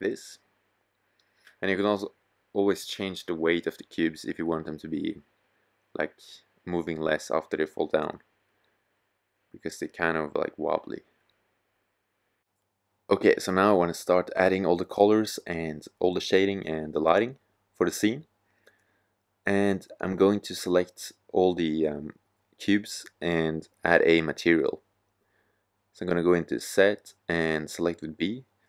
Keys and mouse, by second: 7.3 middle click, 8.6-9.9 middle drag, 14.8-16.4 drag, 16.9-23.9 drag, 25.4 z, 26.2 b.